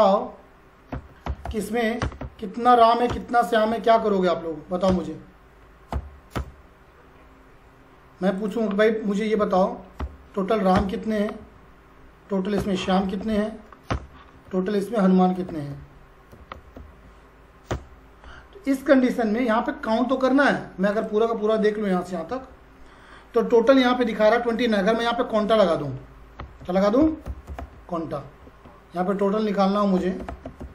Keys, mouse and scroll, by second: 0.6-2.6 typing, 2.0 Return, 3.1 Return, 3.7 typing, 4.9 Return, 5.9 typing, 6.4 Return, 7.1 scroll up 1, 8.4 click, 9.1-10.5 typing, 10.8 Return, 11.2 Up, 11.4 Right, 12.3-13.8 typing, 13.9 Return, 14.2 Up, 14.4 Right, 15.1-17.3 typing, 17.7 Return, 20.9 click, 22.3 ctrl+shift+Down, 24.2 scroll up 1, 25.4 click, 26.1-28.4 typing, 29.1 click, 29.7-30.7 typing.